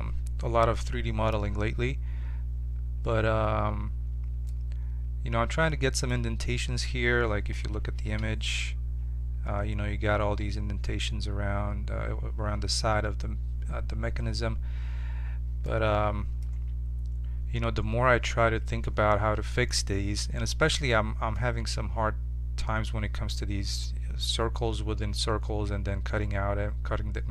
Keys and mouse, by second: 4.5-7.5 drag, 7.5 KP_7, 8.2 z, 15.6-17.5 middle drag, 16.5 z, 25.0 Tab.